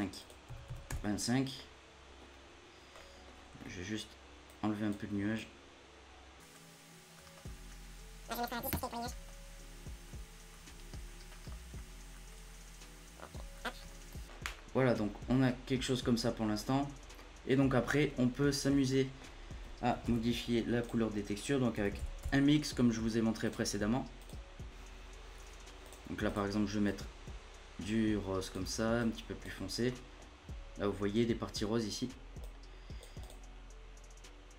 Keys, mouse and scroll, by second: 1.2 scroll down 2, 1.5-2.2 middle drag, 2.2-3.0 scroll up 3, 3.0 middle click, 3.2-4.4 scroll up 7, 3.6 middle click, 4.4-7.2 drag, 7.2 middle click, 7.4 scroll up 1, 7.5 scroll down 6, 7.6-8.2 scroll up 1, 8.2 click, 9.0 middle click, 9.2-10.0 scroll up 2, 10.0 click, 10.6-11.1 scroll down 3, 10.7 middle click, 11.1 middle click, 11.2-11.7 scroll up 5, 11.4 middle click, 11.7-13.6 drag, 13.6-14.1 scroll down 14, 13.8 middle click, 14.1-15.3 scroll up 4, 14.5 middle click, 15.3-16.9 middle drag, 16.9 scroll down 1, 17.1 middle click, 17.5-17.8 scroll up 2, 17.8 middle click, 18.2 scroll up 1, 18.4 middle click, 19.2-20.0 scroll up 1, 20.0 shift+a, 24.7 middle click, 24.8-25.8 scroll up 1, 25.8-29.2 drag, 29.7 scroll up 1, 29.8 middle click, 30.2-31.8 scroll up 1, 32.4-34.5 drag.